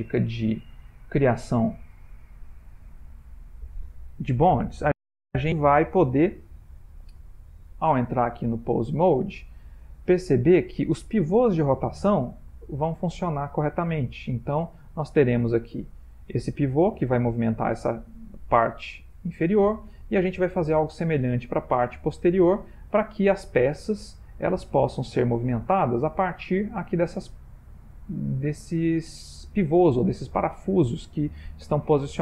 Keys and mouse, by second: 1.2 e, 5.7 Tab, 7.8 click, 10.8 click, 12.5 r, 23.2 click, 24.4 r, 27.0 middle click, 30.5-32.2 middle click.